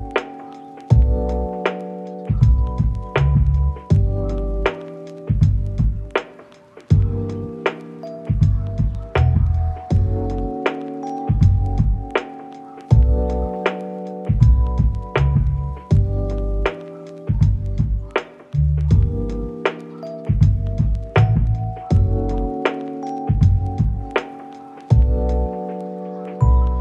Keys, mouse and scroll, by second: 0.3 middle click, 0.9 s, 1.3 double click, 3.6 middle click, 5.6 middle click, 8.3 middle click, 9.0 middle click, 10.5 double click, 11.9 middle click, 12.2 ctrl+middle click, 14.4 middle click, 15.6 shift+click, 16.2 1, 16.4 scroll down 1, 17.0 g, 17.7 ctrl+click, 17.9 middle click.